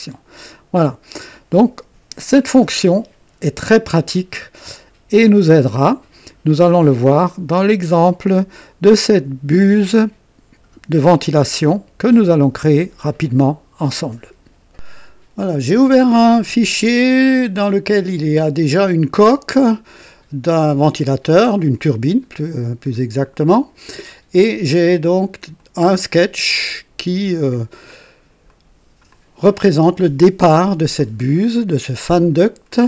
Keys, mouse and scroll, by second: 0.8 scroll down 2, 2.6 scroll up 2, 11.1 scroll down 2, 11.7 right click, 19.5-22.2 drag, 22.9 scroll up 2, 23.5-24.5 drag, 25.5 click, 26.6-27.9 drag, 28.0 scroll up 2, 28.5 right click, 29.1-31.1 drag, 31.2-31.6 scroll down 2, 32.1 scroll up 2, 32.7-32.8 right drag.